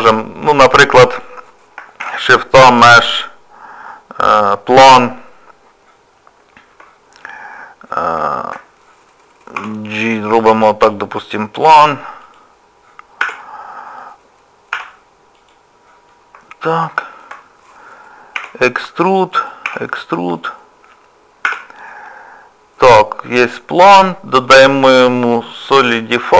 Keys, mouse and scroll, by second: 0.5 shift+middle click, 1.2 click, 7.2 middle click, 8.3 shift+middle click, 9.6 g, 13.3 Tab, 13.4 middle click, 14.7 2, 15.4 click, 16.1 middle click, 16.8 2, 17.0 shift+middle click, 17.3 click, 17.3 2, 18.4 e, 20.0 e, 21.5 Tab, 21.8 middle click, 24.4 click.